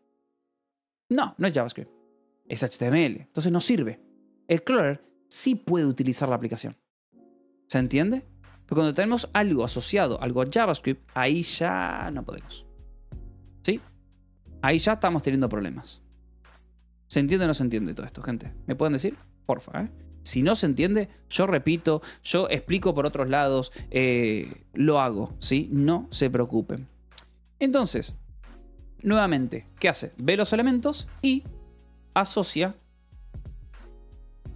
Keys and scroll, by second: 21.5 Escape, 22.8 shift+;, 23.8 Return, 24.3 j, 31.8-34.5 typing.